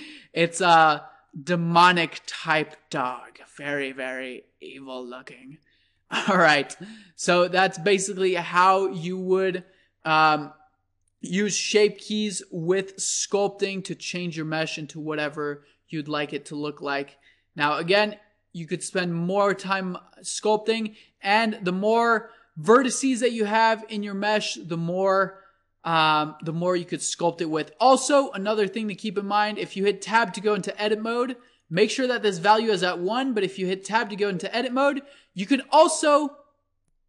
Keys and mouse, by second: 4.8 middle click, 16.8-18.7 drag, 21.1 Tab, 22.7-24.3 drag, 24.3-28.3 middle drag, 28.3 Tab, 29.8 Tab, 30.6 Tab, 31.6-33.6 drag, 34.1 Tab.